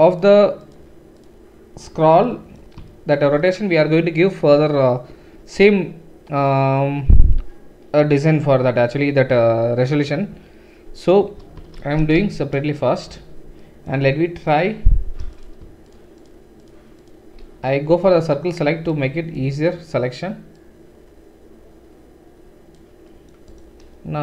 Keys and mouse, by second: 0.2 shift+right click, 0.6 shift+middle click, 0.7 shift+right click, 1.1 shift+middle click, 1.2-23.6 shift+right drag, 11.8 alt+shift+s, 14.5 alt+shift+click, 15.9 shift+click, 15.9 shift+middle click, 16.2 shift+click, 16.2 shift+middle click, 17.0 shift+click, 17.0 shift+middle click, 17.9 c, 23.6-24.2 middle drag.